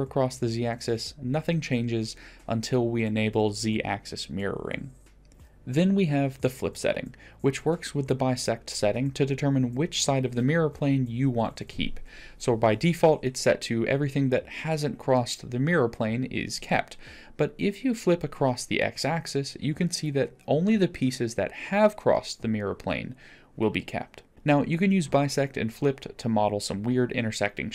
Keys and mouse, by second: 3.0 click, 3.8 g, 5.1 ctrl+z, 7.3-7.9 drag, 9.3-10.3 middle drag, 16.9-21.8 drag, 21.8-23.3 middle drag, 24.1 click, 26.1-27.1 middle drag.